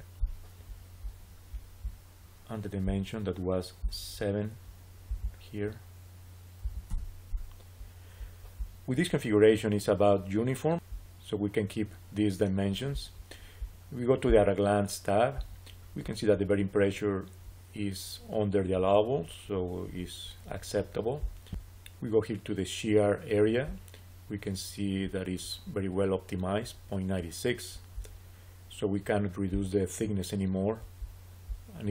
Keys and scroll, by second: 6.6 7, 6.8 Return.